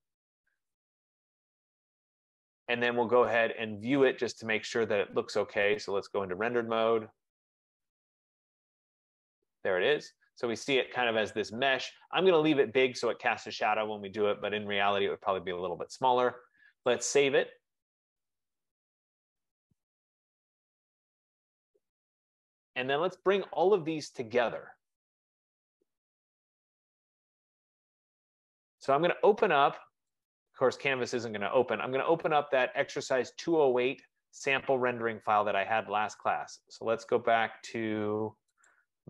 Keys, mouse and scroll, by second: 0.0-0.5 typing, 2.0 click, 4.0 click, 6.4 click, 12.1 right click, 17.0 click, 18.1 click, 21.0-22.5 typing, 30.4 click, 33.4 click, 35.4 click, 36.3 click, 38.4 click, 38.7 click.